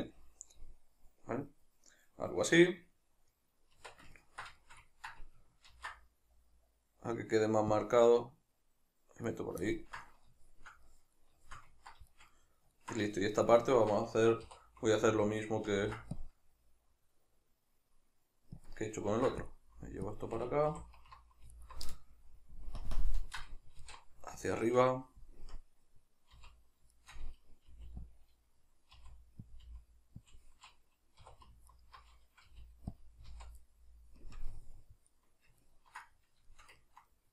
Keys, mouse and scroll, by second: 3.7 Tab, 4.1 ctrl+middle click, 5.8 ctrl+r, 5.8-9.4 middle drag, 9.4 right click, 9.7-18.7 ctrl+middle drag, 14.5 3, 15.8 ctrl+r, 18.7 click, 19.2 ctrl+r, 20.2 click, 20.8 3, 21.6 alt+right click, 22.4 ctrl+KP_Add, 22.8 ctrl+KP_Subtract, 23.8 alt+q, 24.5-27.7 shift+middle drag, 25.4 KP_Decimal, 26.4 z, 27.7 g, 28.2 click, 28.9 r, 29.5 click, 29.7 g, 30.3 click, 31.2 2, 31.7 alt+right click, 32.5 g, 33.0 click, 33.3 z, 34.2 KP_Decimal, 34.5-36.5 middle drag.